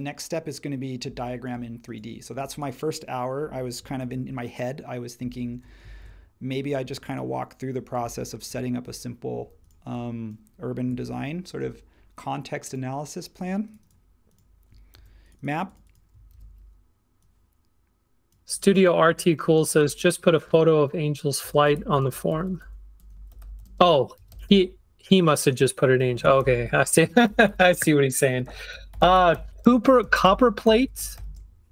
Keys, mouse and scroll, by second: 4.0 shift+Left, 5.4 shift+Left, 8.1 shift+Left, 8.5 shift+Left, 11.0 shift+Down, 14.9 super+c, 16.3 super+v, 21.4-25.0 typing, 26.1-30.1 typing, 28.4 super+a.